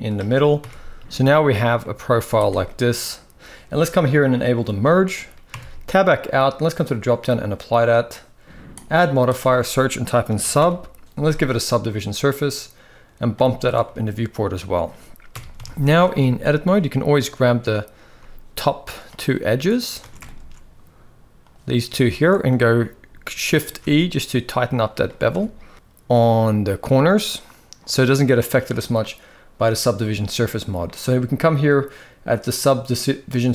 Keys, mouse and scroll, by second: 0.8 shift+middle click, 0.8 a, 1.5 middle click, 1.9 z, 2.4 middle click, 4.0 click, 4.5 shift+middle click, 5.4 Tab, 5.4-5.9 middle drag, 6.6-7.1 drag, 8.6-11.5 drag, 13.0 click, 13.5-14.4 middle drag, 15.0 KP_1, 15.5 Tab, 15.6 shift+middle click, 15.9 z, 16.5 click, 17.8 z, 19.0 middle click, 20.0 alt+a, 21.8 alt+shift+click, 22.2 middle click, 23.4 shift+e, 25.4 Tab, 25.5 middle drag, 26.9 middle click, 29.8 middle click.